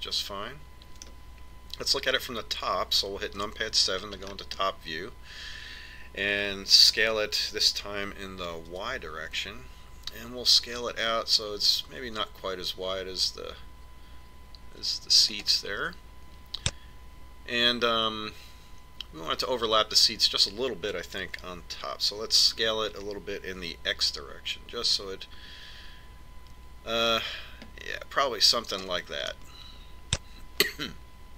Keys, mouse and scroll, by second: 0.3-2.3 middle drag, 4.5 KP_7, 5.4-7.8 middle drag, 8.1 s, 23.8 s, 30.6-31.3 middle drag.